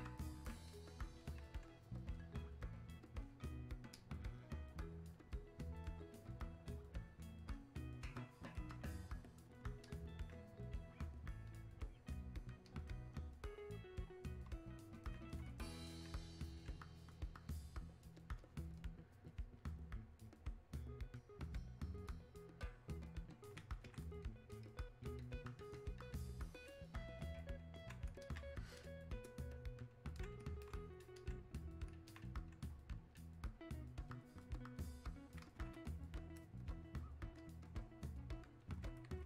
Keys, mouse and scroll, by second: 37.4-39.2 drag.